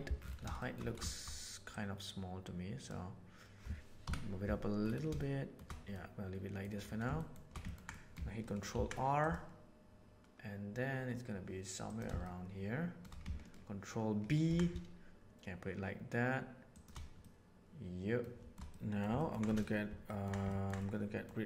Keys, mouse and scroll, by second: 0.5 shift+middle click, 1.7-2.8 drag, 4.0 KP_7, 5.1 shift+middle click, 5.9 middle click, 7.1 shift+middle click, 7.6 ctrl+middle click, 7.9-12.0 ctrl+middle drag, 8.7 ctrl+r, 12.2 shift+middle click, 14.4 ctrl+b, 17.2 middle click, 18.6 middle click, 19.2 ctrl+middle click, 19.4 middle click, 20.0 ctrl+middle click, 20.5 ctrl+middle click, 20.8 middle click.